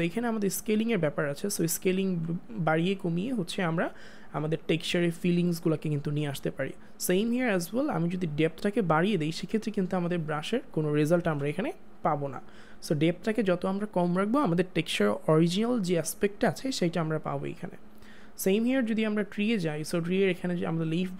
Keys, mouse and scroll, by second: 0.4 click, 2.1 ctrl+z, 6.2 ctrl+z, 8.3 click, 10.9 click, 11.2 ctrl+z, 11.5 click, 18.0 click.